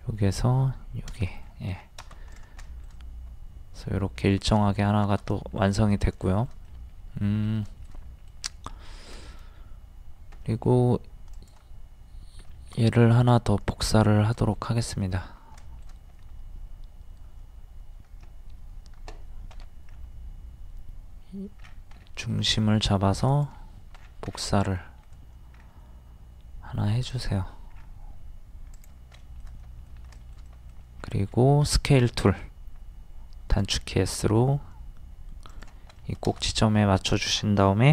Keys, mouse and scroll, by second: 1.4 middle click, 1.4 scroll down 1, 2.3 click, 2.7 shift+middle click, 4.3-4.6 scroll down 1, 5.3 middle click, 6.2 shift+middle click, 7.9 middle click, 8.7 scroll up 1, 9.6-10.2 scroll up 1, 10.4 middle click, 11.3 click, 12.4 middle click, 14.0 shift+middle click, 14.7 scroll up 1, 15.6 shift+middle click, 19.5 m, 19.9-20.5 scroll up 1, 23.3 click, 24.0 scroll down 1, 25.6-26.8 scroll down 1, 27.7-28.1 scroll up 1, 28.8 click, 29.2 shift+middle click, 30.5 middle click, 31.0-31.3 scroll up 1, 31.7 middle click, 33.6 click, 36.0 shift+middle click, 37.0 scroll up 1.